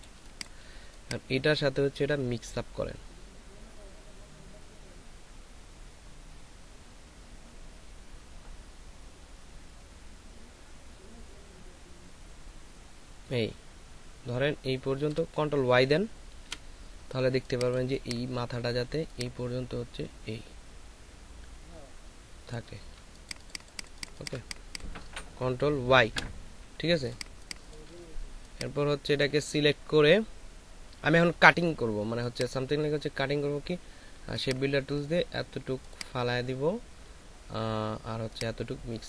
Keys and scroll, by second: 16.3 ctrl+shift+y, 17.2 space, 22.9 ctrl+alt+shift+space, 25.2 ctrl+alt+shift+space, 27.2 space, 32.1 space.